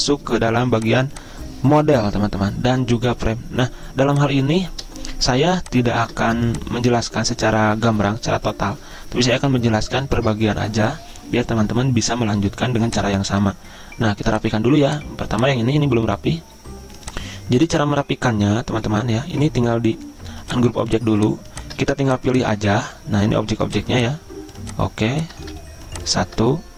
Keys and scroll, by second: 6.1 ctrl+z, 12.5 z, 21.9 ctrl+z, 25.5 ctrl+z.